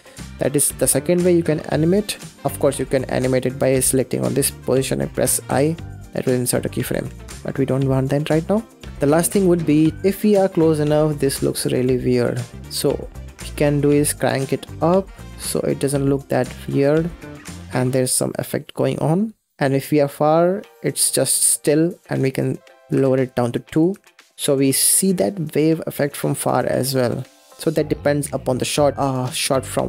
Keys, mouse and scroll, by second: 0.5 click, 1.5 middle click, 2.3 scroll up 10, 2.5-5.3 middle drag, 7.1 ctrl+z, 7.5-7.9 scroll down 4, 7.9 middle click, 8.1-8.6 scroll down 4, 8.6-9.7 shift+middle drag, 9.7-10.1 scroll down 2, 10.1 middle click, 10.5-11.4 scroll up 1, 11.4-11.9 scroll up 1, 11.9-12.3 scroll down 4, 12.3 middle click, 12.6-14.0 scroll up 14, 13.3-13.6 middle drag, 14.0-15.6 drag, 15.6 scroll down 2, 16.4 click, 17.1-19.6 middle drag, 19.6 scroll down 8, 21.9-23.1 drag, 23.6 click, 25.9 scroll up 4, 27.0-27.5 scroll down 1, 27.5-28.0 scroll down 1, 28.0-29.5 middle drag, 29.5-29.8 scroll down 1.